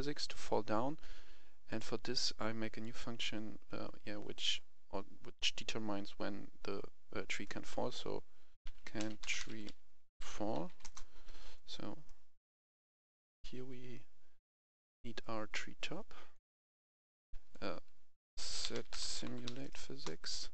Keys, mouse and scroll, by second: 8.6-10.7 typing, 10.8 Return, 11.5 right click, 14.7-18.1 drag, 18.4-19.4 typing, 19.9 Return.